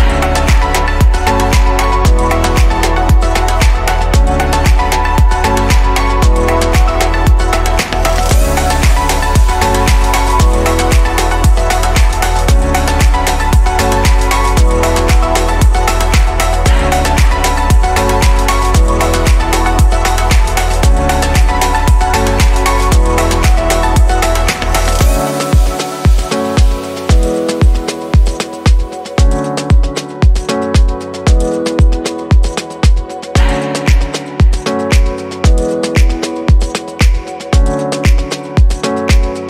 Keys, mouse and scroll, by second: 12.2-13.1 middle drag, 13.1-15.6 scroll up 3, 15.6-16.4 shift+middle drag, 16.4-17.1 scroll up 2, 17.1 scroll up 1, 17.1-19.9 shift+middle drag, 19.9-20.5 scroll up 1, 20.5-24.0 scroll up 1, 24.0-25.3 scroll up 1, 25.3-26.4 scroll down 5, 26.4-30.5 middle drag, 30.8-31.6 scroll down 2, 31.6-32.0 scroll down 2, 32.7 click, 33.8 click, 35.2 shift+d, 36.5 click, 38.9-39.4 scroll up 3.